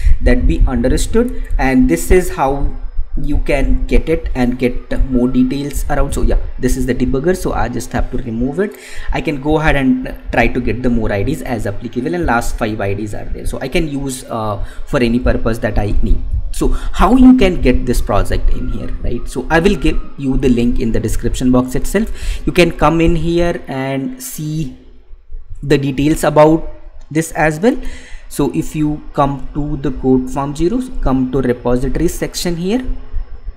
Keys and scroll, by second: 1.8 alt+Tab, 9.3 Tab.